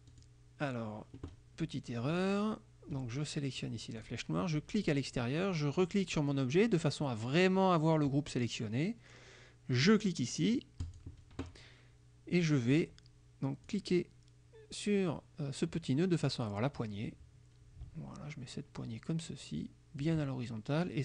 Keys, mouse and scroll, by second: 0.2 click, 2.2 click, 4.0 click, 4.8 click, 5.8 click, 10.9 click, 13.7 click, 16.9-20.3 drag.